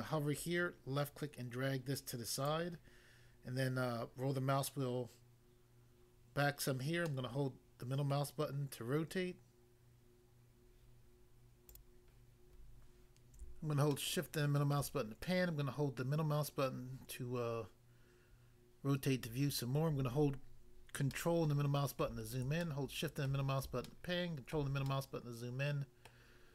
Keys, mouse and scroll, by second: 0.4 click, 2.5 click, 3.4 scroll down 1, 7.1 middle click, 8.1 middle click, 11.7 click, 11.8 click, 13.9 shift+middle click, 16.7 middle click, 21.1 ctrl+middle click, 22.6 shift+middle click, 26.1 middle click.